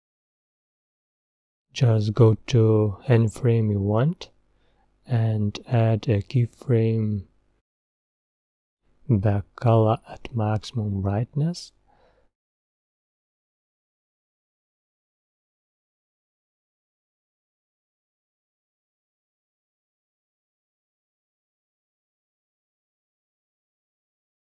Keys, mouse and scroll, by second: 16.2-19.2 drag, 24.0-24.5 drag.